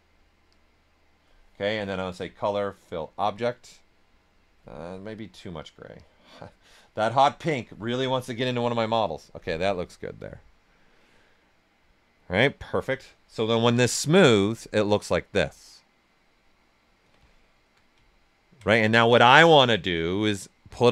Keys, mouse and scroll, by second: 11.4-13.7 right drag, 13.7 d, 14.3 right click, 17.2 alt+right click.